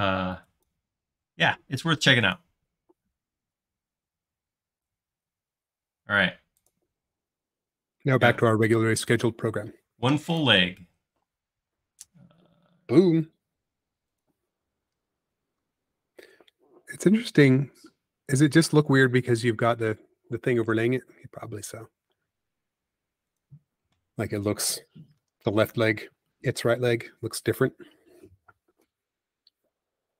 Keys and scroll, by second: 7.2 space, 11.2 m, 17.4 space, 19.9 m.